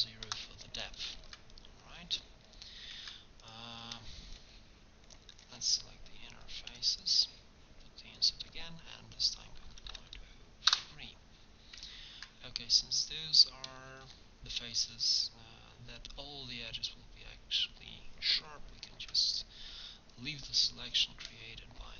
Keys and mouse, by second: 1.2 ctrl+Tab, 3.0 ctrl+Tab, 6.9 click, 6.9 i, 8.2-10.2 drag, 12.6 middle click, 17.4-19.0 middle drag, 19.0 ctrl+e.